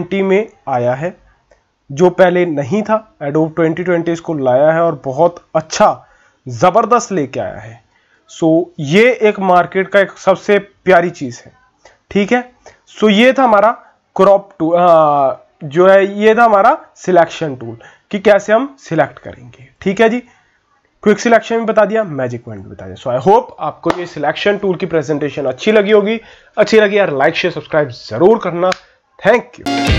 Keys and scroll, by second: 7.9 ctrl+-, 8.1 ctrl+-.